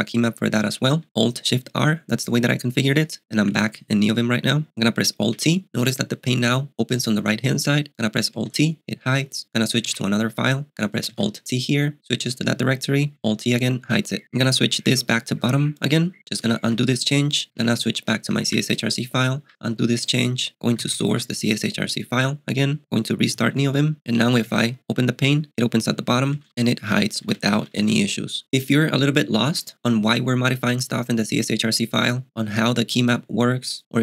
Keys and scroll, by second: 0.0-0.6 typing, 5.3 t, 8.4 t, 9.8 space, 9.9 BackSpace, 11.1 alt+t, 13.2 alt+t, 16.6 u, 17.5 shift+h, 18.2 j, 18.4 Return, 19.4 u, 20.6-21.6 typing, 23.2-24.2 typing, 24.5 alt+t, 26.4 alt+t, 27.0 alt+t, 27.3 alt+t, 27.6 †, 27.8 alt+t.